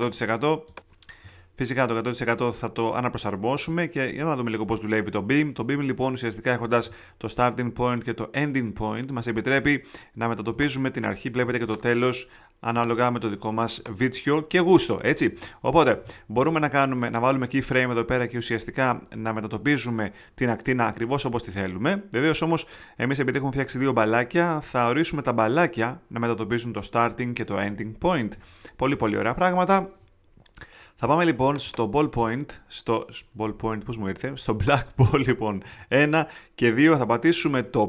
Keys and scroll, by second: 15.2 super+z.